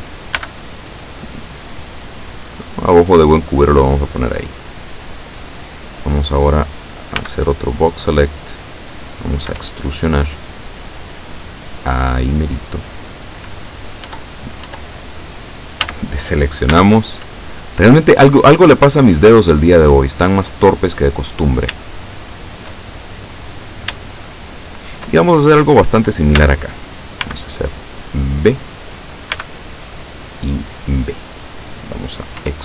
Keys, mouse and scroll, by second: 0.0 a, 0.4 b, 1.1 click, 2.4-5.3 drag, 7.2 b, 7.7 click, 9.5 e, 13.3 click, 14.1 Tab, 15.9 a, 16.7 b, 17.3 click, 18.5-21.1 drag, 21.9-22.9 shift+middle drag, 23.6-24.0 scroll up 2, 24.2-25.3 shift+middle drag, 26.5 a, 27.4 b, 27.8-28.8 drag, 29.4 b, 30.1-31.1 drag, 32.5 e.